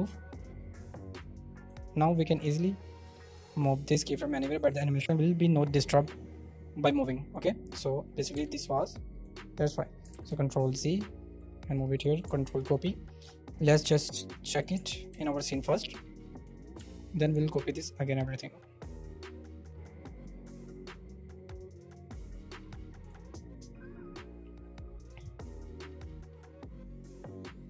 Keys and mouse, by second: 0.2-1.7 drag, 2.5 g, 3.1 drag, 3.7-7.3 right drag, 7.7 g, 8.6 Escape, 9.3 click, 10.2 ctrl+z, 10.3 ctrl+z, 11.3-12.3 drag, 12.4 ctrl+c, 13.6-14.6 middle drag, 15.4 ctrl+v, 15.9 g, 16.7 Escape, 19.1-23.1 drag, 25.7-27.6 drag.